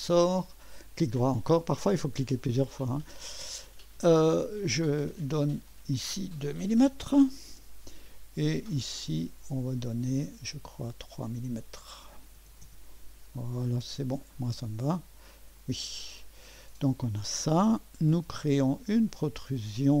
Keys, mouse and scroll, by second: 0.8 right click, 1.7 right click, 2.6 right click, 4.4 click, 6.0 click, 6.3 click, 6.8-7.5 typing, 9.1 click, 12.1-12.9 typing, 15.6 click, 16.6-18.1 typing, 19.8 click.